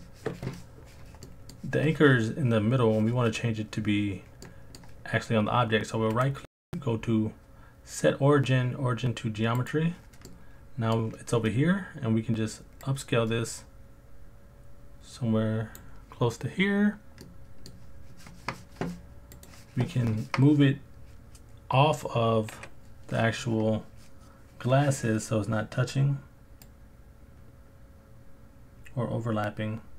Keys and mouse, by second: 1.3 middle click, 4.5 middle click, 6.2-9.7 right drag, 10.3 middle click, 12.9 right click, 17.2 middle click, 19.4 click, 22.5 KP_Decimal, 26.8 click, 28.1 click.